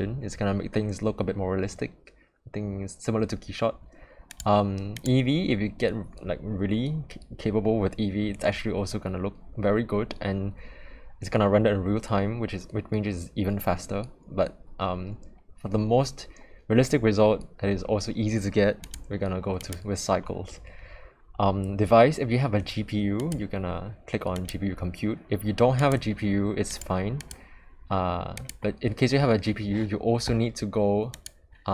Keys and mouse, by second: 4.4-5.1 drag, 18.8-19.7 drag, 23.4-24.5 drag, 25.9 click, 27.3-28.5 drag, 31.1-31.7 drag.